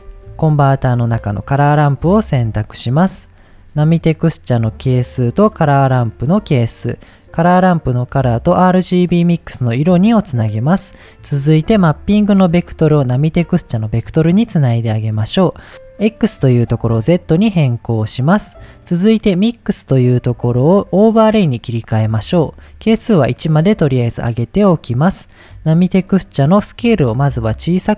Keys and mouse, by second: 0.1 shift+a, 5.1-6.6 drag, 8.1-9.6 drag, 10.9 click, 12.3-13.8 drag, 16.3-17.3 drag, 18.1 middle click, 19.8-21.5 drag, 22.9 click, 24.6 middle click, 26.9-27.9 drag.